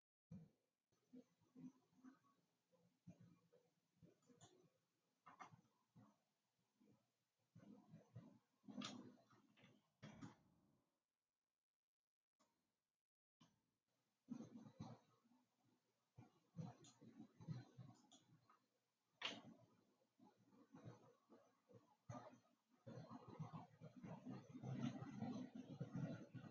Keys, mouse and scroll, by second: 7.1-9.0 scroll down 2, 10.5 ctrl+r, 19.7-23.0 middle drag.